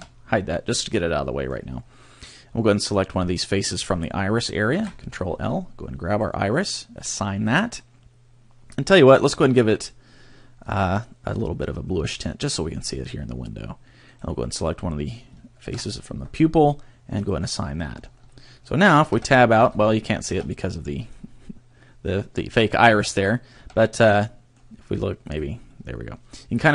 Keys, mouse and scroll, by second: 0.9 middle click, 1.7-2.2 scroll up 2, 3.0 right click, 4.7 ctrl+l, 6.1 click, 6.9 click, 9.5 click, 10.7 click, 14.1 right click, 15.7 ctrl+l, 16.6 click, 17.2 click, 17.9 scroll down 2, 19.1 Tab, 19.6 Tab, 20.3 Tab, 20.7 middle click, 22.9 Tab, 23.7 a, 24.2 middle click, 25.3 click, 25.7 middle click.